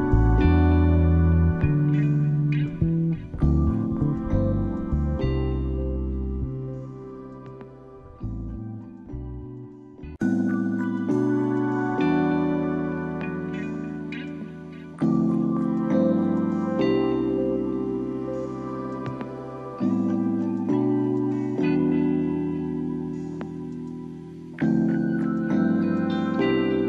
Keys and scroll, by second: 7.7 ctrl+z, 9.7 Down.